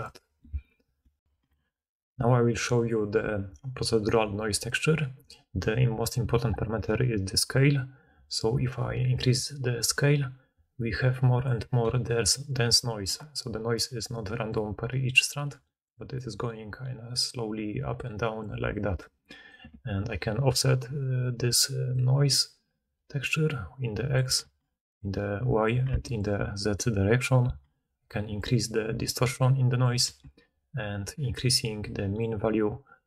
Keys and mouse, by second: 0.0 d, 1.2 ctrl+alt+Insert, 15.2-22.4 drag, 15.4-19.6 d, 24.3 ctrl+z, 25.8 ctrl+z.